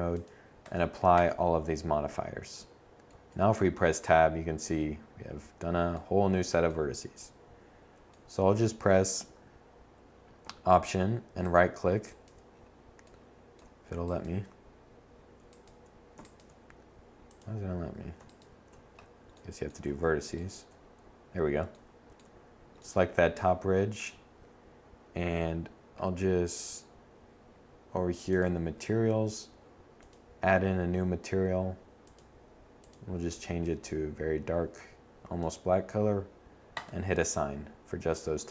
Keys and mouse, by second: 0.6 Tab, 9.9 middle click, 10.7 middle click, 10.9 middle click, 16.4 middle click, 24.1-25.7 middle drag.